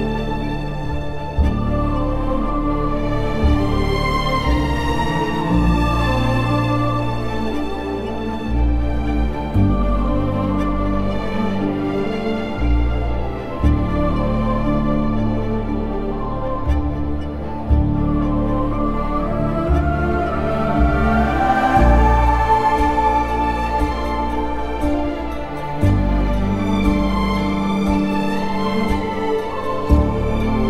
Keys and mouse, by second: 1.2 shift+click, 1.6 shift+click, 4.6 alt+shift+click, 5.5 alt+shift+click, 6.1 alt+shift+click, 7.8 alt+shift+click, 10.2 alt+shift+click, 10.6 alt+shift+click, 11.4 alt+shift+click, 15.9 alt+shift+click, 19.3 alt+shift+click, 21.2 alt+shift+click, 21.8 alt+shift+click, 24.5 alt+shift+click, 26.3 alt+z, 29.1 ctrl+b.